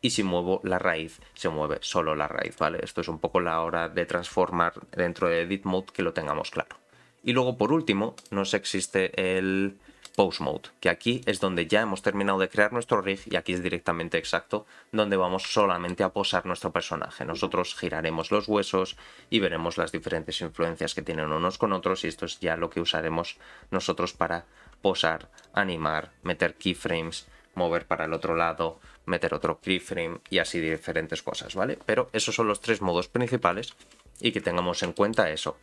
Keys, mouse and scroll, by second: 0.6 g, 3.0 scroll down 1, 4.5-5.6 scroll down 2, 8.1-10.1 drag, 11.2 click, 15.6 shift+middle click, 16.5 r, 34.9 shift+middle click, 35.3-35.6 scroll up 5.